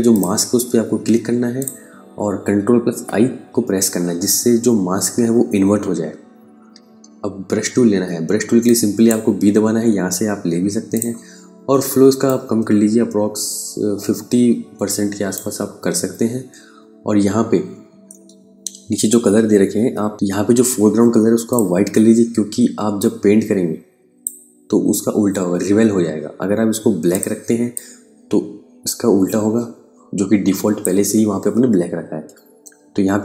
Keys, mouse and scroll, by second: 2.5 i, 7.0 b, 8.1 click, 17.2 super+Num_Lock, 17.5 KP_Add, 20.9 click, 26.6 click, 31.7 KP_Subtract.